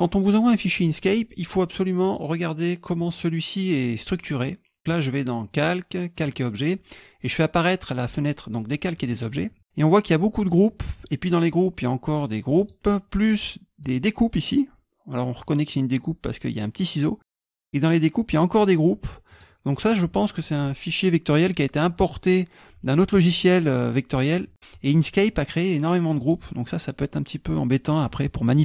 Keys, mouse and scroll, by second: 2.0 click, 3.0 click, 4.4 click, 5.5 click, 6.2 click, 10.4 click, 12.6 click, 13.8 click, 17.6 click, 18.3 click, 19.3 click, 19.8 click, 26.2 click.